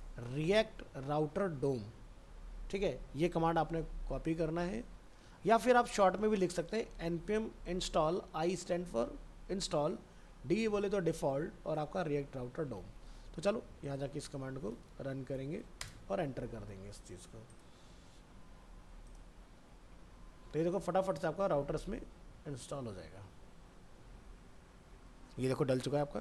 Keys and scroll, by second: 4.1 alt+Tab, 12.9 alt+Tab.